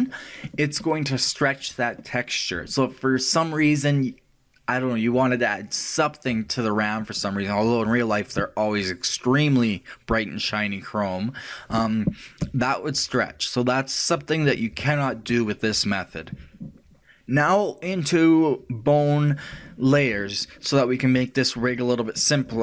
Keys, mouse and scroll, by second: 18.9 right click, 21.7 click.